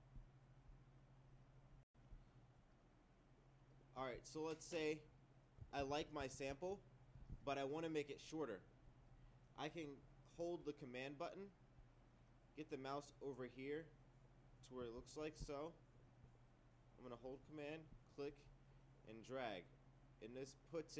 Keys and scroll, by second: 5.8 ctrl+2, 6.2 ctrl+3, 6.5 ctrl+4.